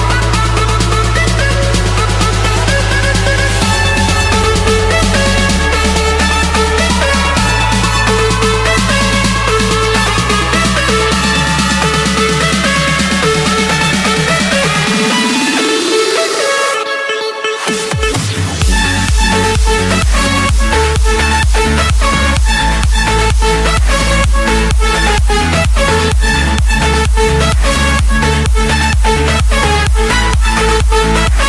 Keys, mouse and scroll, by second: 0.0-0.1 typing, 1.2 middle click, 1.7 Escape, 2.1 click, 2.5 click, 3.5 shift+click, 4.5 Delete, 5.8 Return, 11.5 click, 12.8 click, 13.7 Escape, 14.3 Escape, 15.1 click, 16.0 click, 16.3 scroll, 16.9 click, 17.4 scroll, 17.9 click, 18.3-19.0 scroll, 19.4 click, 19.7 scroll, 19.9 Escape, 21.2-21.9 typing, 24.3 click, 26.1 ., 27.2 8, 27.5 Return, 29.2-30.3 typing, 30.7 Return.